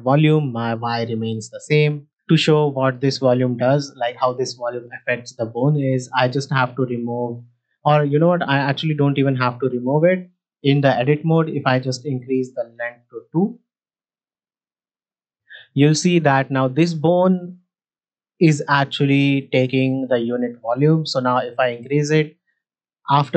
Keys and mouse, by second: 9.7 shift+middle drag, 10.5 Tab, 11.1 middle click, 12.0-13.6 drag, 14.5 Tab, 16.0 shift+middle click, 21.3-23.3 drag.